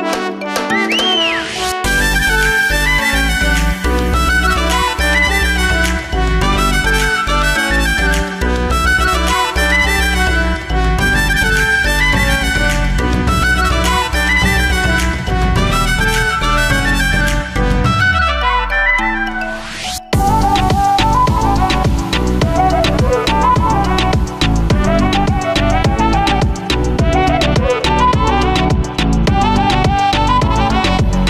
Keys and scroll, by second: 16.8 ctrl+z.